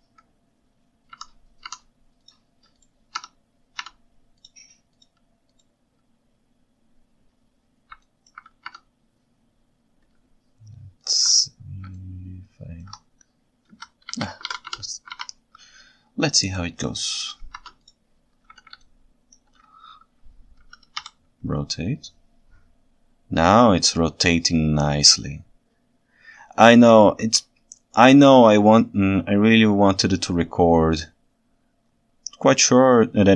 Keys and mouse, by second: 8.1 ctrl+alt+right drag, 12.0 ctrl+shift+right click, 13.7 KP_3, 14.1 KP_1, 14.5 alt+a, 14.7 Tab, 15.2 alt+a, 17.6 ctrl+Tab, 18.9-19.4 ctrl+shift+right drag, 20.9 r, 20.9 y.